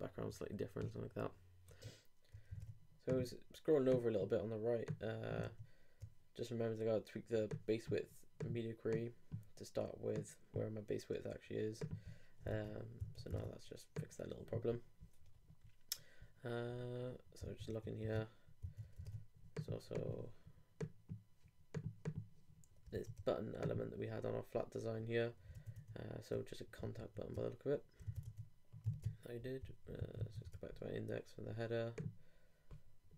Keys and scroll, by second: 1.7 super+Tab, 2.6 super+Tab, 12.5 super+Tab, 22.9 super+i, 25.5 super+Tab, 28.8 shift+super+Tab, 29.7 shift+super+2, 30.0 super+3, 30.2 super+2.